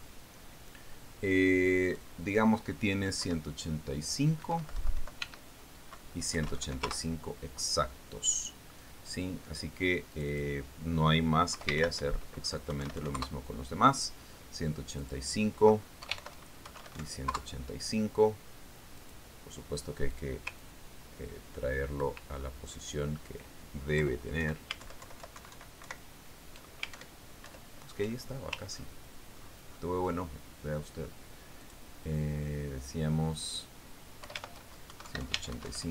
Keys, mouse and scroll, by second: 3.3 click, 4.7 BackSpace, 5.9 Delete, 6.7 Tab, 7.8 KP_1, 8.0 KP_8, 8.1 KP_5, 8.3 KP_Enter, 10.5 click, 11.6 click, 13.0 Home, 13.3 shift+End, 14.2 KP_1, 14.3 KP_8, 14.4 KP_5, 14.6 KP_Enter, 16.5 click, 17.5 Home, 17.7 shift+End, 18.1 shift+KP_1, 18.2 shift+KP_8, 18.4 shift+KP_5, 18.7 shift+KP_Enter, 20.4 click, 21.6 click, 22.1-23.7 ctrl+drag, 23.9-24.5 ctrl+scroll up 2, 25.4 Left, 25.9 Right, 26.3 alt+Left, 26.8 alt+Right, 28.4 alt+Up, 28.9 alt+Down, 29.8-30.9 alt+scroll up 3, 30.9-31.7 ctrl+scroll down 2, 31.7 ctrl+scroll up 2, 31.7-32.8 ctrl+drag, 33.0 click, 34.8 click, 35.7 Home, 35.8 shift+End.